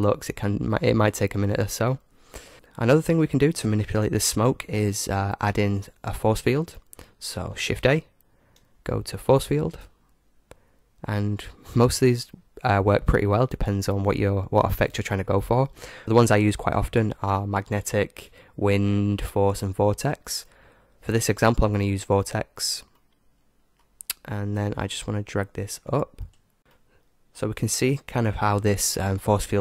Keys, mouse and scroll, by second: 3.3-4.9 drag, 7.7 shift+a, 23.0-24.9 middle drag, 25.8 click, 26.6 g, 26.8 middle click, 27.2-28.6 middle drag.